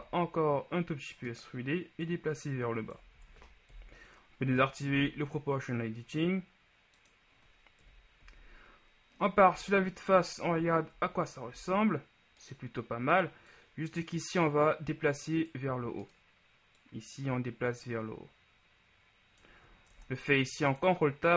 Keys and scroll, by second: 0.0 e, 3.2 ctrl+z, 3.8 ctrl+o, 5.0 g, 8.0 KP_1, 8.3 z, 9.6 z, 11.6 ctrl+z, 20.0 ctrl+Tab.